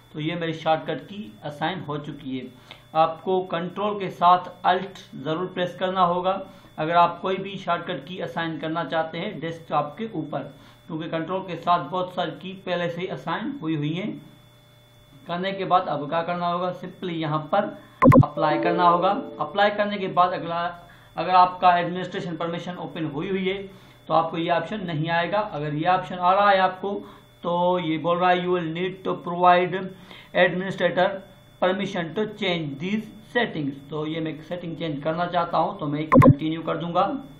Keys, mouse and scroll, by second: 18.0 click, 36.1 click.